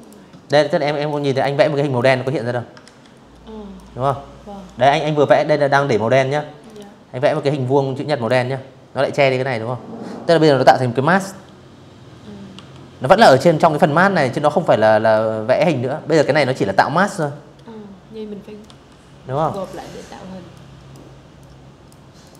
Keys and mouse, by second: 0.5 ctrl+z, 1.4 click, 2.6 Delete, 4.3 click, 5.0 click, 10.2 Delete, 12.8 click, 13.9 ctrl+z, 14.4 click, 16.3 v, 17.0 click, 17.2 click, 18.2 click, 19.1 click, 19.9 click, 20.5 v, 21.5 click.